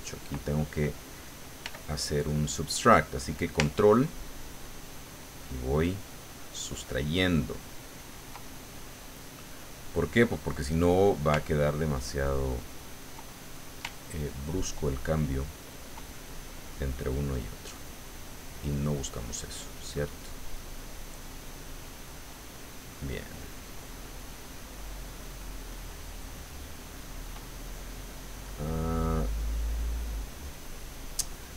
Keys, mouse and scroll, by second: 1.6 f, 2.3 click, 3.9-9.2 ctrl+drag, 8.7-11.2 ctrl+middle drag, 11.6-13.8 ctrl+drag, 13.9-19.7 ctrl+drag, 19.0 right click, 20.6-21.7 drag, 21.8 middle click, 22.3-23.7 drag, 23.1 middle click, 23.5 right click, 23.8 click, 24.8 middle click, 25.7 click, 26.4 middle click.